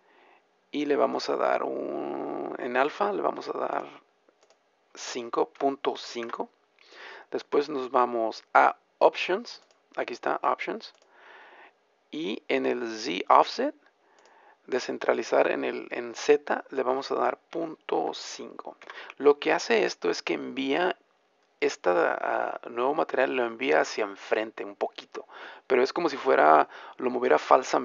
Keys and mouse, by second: 10.8-13.1 drag, 13.1-16.3 middle drag.